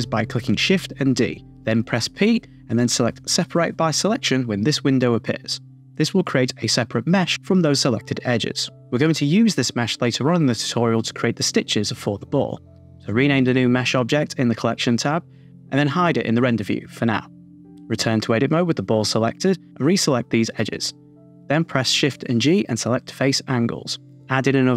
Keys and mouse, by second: 0.2 shift+d, 1.2 click, 3.4 p, 5.7 a, 5.8 Tab, 7.4 Tab, 9.6-12.8 drag, 14.3 click, 16.9 Tab, 19.5 shift+click, 20.5 shift+click, 21.4 shift+g, 24.3 s.